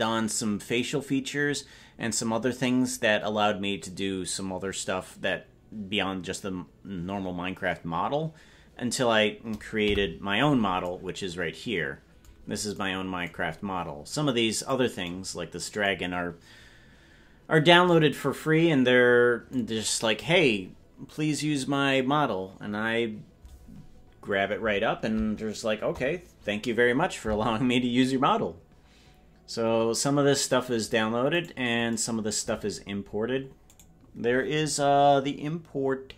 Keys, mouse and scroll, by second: 9.8 KP_Decimal, 14.7 right click, 25.8 KP_0, 31.5 right click, 33.0-33.8 scroll up 5, 33.8 right click, 33.8-34.8 scroll down 5.